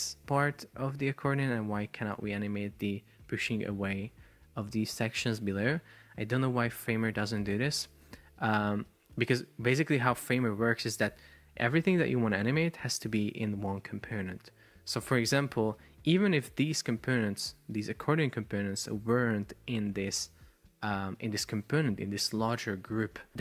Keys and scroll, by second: 0.4 Escape, 2.3 shift+super+4, 3.3 Escape, 9.1 Escape, 23.3 super+p.